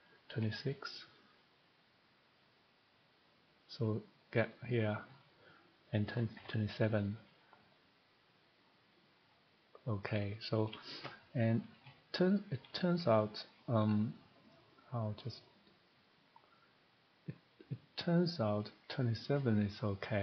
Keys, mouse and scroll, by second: 0.1 click, 0.3-0.6 typing, 1.3 click, 5.9 click, 6.1 typing, 7.2 click, 14.5 click, 16.1 click, 18.0 click.